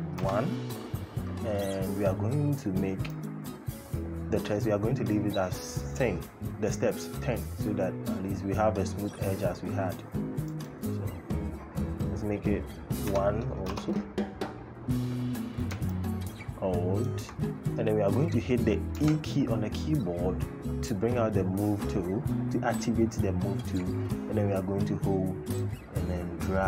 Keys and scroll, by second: 12.9 KP_1, 13.4 Return, 18.7 e.